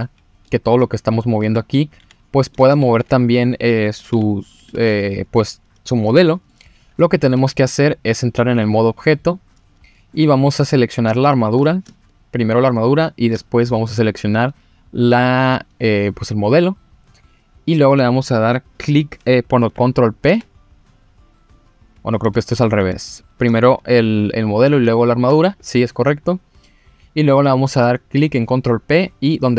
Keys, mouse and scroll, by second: 1.4 Tab, 2.0 g, 2.5 click, 2.8 ctrl+z, 3.3 click, 4.1 g, 4.5 click, 4.7 ctrl+z, 6.0-6.5 middle drag, 6.7 scroll down 1, 7.0 middle click, 7.4 Tab, 7.7 middle click, 8.9-9.5 drag, 9.8 scroll up 1, 10.1 middle click, 11.1-11.5 shift+middle drag, 12.8 shift+click, 19.7 ctrl+p, 22.1 click, 22.4 click, 23.1 shift+click, 24.8 ctrl+p.